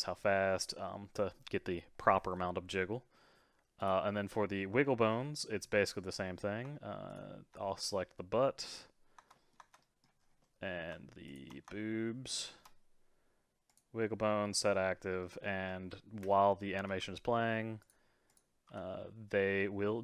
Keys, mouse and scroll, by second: 2.3-3.8 middle drag, 3.8 click, 5.1-6.1 scroll down 8, 7.1 shift+click, 8.2-10.2 middle drag, 10.2 scroll up 4, 10.4-11.3 middle drag, 11.3 shift+click, 11.7-12.3 shift+middle drag, 12.3 shift+click, 13.7 click, 14.8-15.2 scroll down 3, 15.2-16.2 middle drag, 16.2 space, 16.9 g, 18.3 click, 18.7 g.